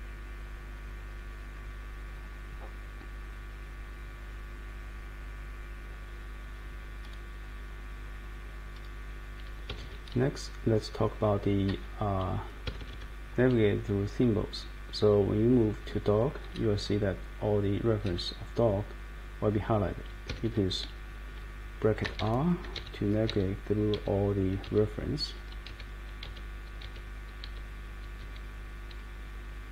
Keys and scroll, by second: 9.7 Escape, 9.8 Escape, 11.1 Page_Up, 11.7 Page_Down, 12.6 Escape, 12.8 Escape, 12.9 Escape, 15.5 Page_Up, 15.8 Page_Up, 16.1 Page_Up, 16.2 Up, 16.5 Up, 16.8 Left, 17.4 Left, 17.4 Left, 17.5 Left, 17.6 Left, 17.7 Left, 17.7 Left, 17.9 Left, 17.9 Left, 18.0 Up, 20.3 Escape, 21.8-28.6 typing.